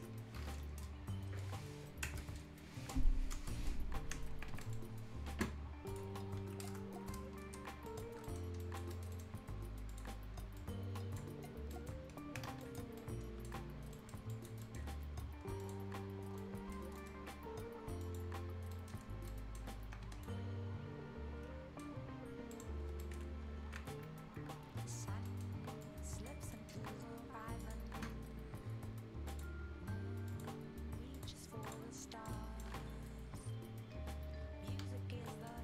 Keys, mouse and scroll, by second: 2.8-3.1 scroll down 1, 3.8-4.2 scroll down 1, 4.4 Escape, 5.0 scroll up 1, 5.9 click, 6.2-6.6 scroll down 1, 6.7 Return, 6.9 scroll up 1, 7.1-7.5 scroll down 1, 7.5 scroll up 1, 7.9 shift+click, 8.2 shift+right click, 8.6 click, 8.9 right click, 9.9 click, 10.1 scroll up 1, 10.9 click, 11.5 scroll down 1, 11.7 right click, 12.1 scroll up 1, 12.3 Escape, 12.6 click, 13.0 right click, 13.4 Delete, 13.6 scroll up 1, 13.9 right click, 14.3 click, 14.6 right click, 15.6 click, 16.0 scroll down 1, 16.4 right click, 17.0 middle click, 17.1 scroll up 1, 18.0 click, 18.7 right click, 18.9 scroll down 1, 19.3 right click, 19.7 scroll up 1, 19.8 Escape, 20.2-22.5 right drag, 23.0 right click, 23.8 ctrl+scroll down 1, 24.5 ctrl+scroll up 1, 24.7 ctrl+scroll down 1, 25.1 ctrl+scroll up 1, 25.3 ctrl+right click, 25.3 ctrl+scroll, 25.4 ctrl+scroll up 1, 25.8 ctrl+click, 26.5 ctrl+right click, 27.6 ctrl+click, 31.9 ctrl+scroll up 1, 32.0 ctrl+right click, 35.3 ctrl+right click, 35.5 ctrl+scroll down 1.